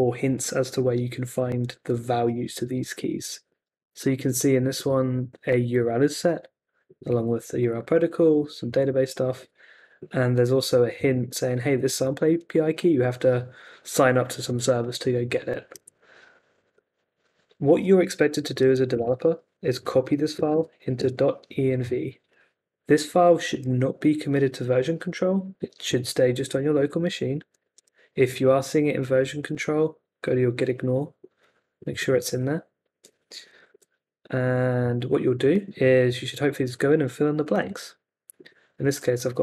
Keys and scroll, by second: 16.7 n, 18.6-19.7 typing, 21.0 Return, 33.3 Escape, 33.4-34.2 typing, 38.7 x.